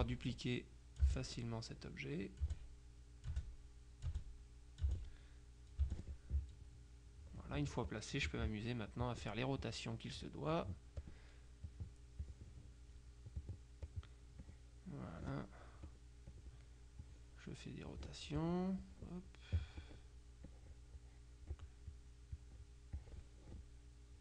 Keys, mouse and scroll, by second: 0.0 space, 1.1 space, 2.5-5.9 typing, 8.0 click, 9.1 click, 11.7-13.5 drag, 13.9 click, 14.6-15.7 drag, 16.0 click, 17.1 click, 18.9 click, 19.9 click, 20.6-23.0 drag.